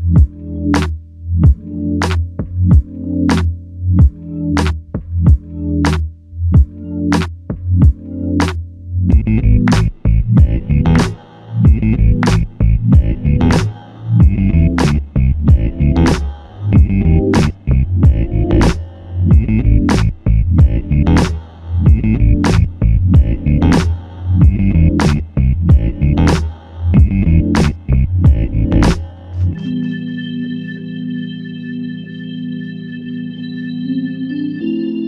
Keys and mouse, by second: 4.8 alt+click, 6.7 double click, 12.9 alt+click, 14.9 alt+l, 15.1 ctrl+click, 18.6 alt+click, 22.7 double click, 25.7-26.9 typing, 28.2-28.9 typing, 28.7 alt+click.